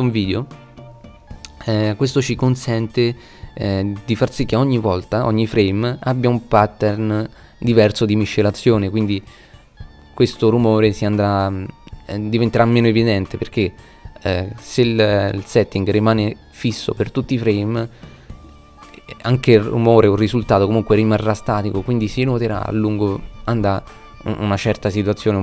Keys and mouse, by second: 12.5 middle click, 14.4 middle click, 25.3 shift+f.